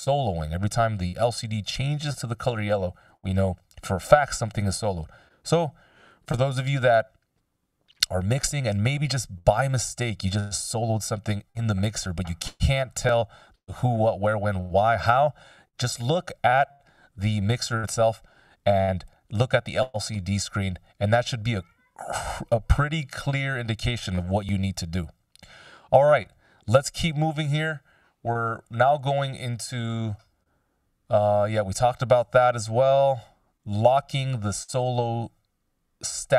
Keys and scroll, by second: 6.2 x, 12.5 x, 16.2 x, 17.8 x, 19.4 x, 21.7 x, 24.8 x.